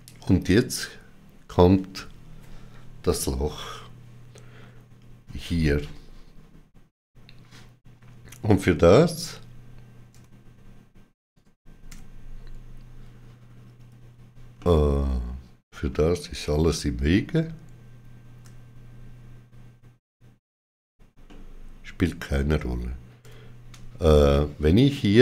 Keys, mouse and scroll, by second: 14.4 middle click, 21.2 middle click, 24.0 middle click, 24.2 shift+middle click.